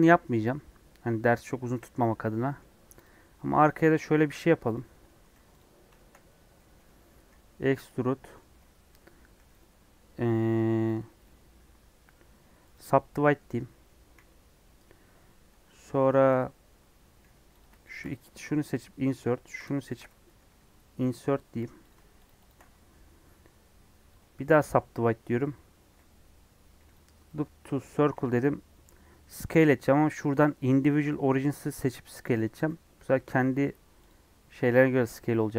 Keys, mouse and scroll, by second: 0.1 scroll up 4, 0.4-3.0 middle drag, 3.0 click, 3.6 Tab, 3.8 middle click, 4.0-4.7 scroll up 1, 4.7 click, 5.0 middle click, 5.3 3, 5.5 click, 5.9 shift+middle click, 6.2 scroll up 1, 6.5 middle click, 7.1 e, 8.2 middle click, 8.4 scroll up 2, 12.7 right click, 13.1 middle click, 13.3 scroll up 1, 14.2 scroll up 1, 17.6 click, 18.7 |, 19.5 click, 22.2 shift+click, 22.4 shift+click, 24.6-28.1 right drag, 28.1 s, 31.8 click, 32.5 s, 34.8 s.